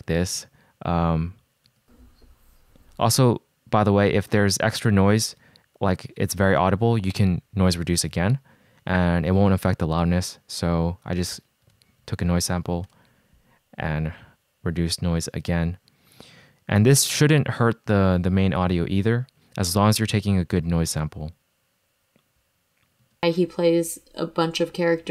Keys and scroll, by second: 1.8 space, 6.1 shift+p, 12.0 shift+super+p, 13.0 Return, 23.1 space.